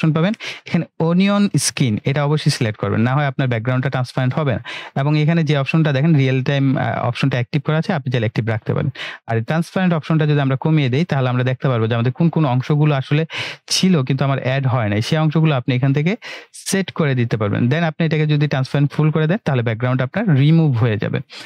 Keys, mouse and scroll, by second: 2.0 click, 9.6-13.4 drag, 16.8-20.9 drag.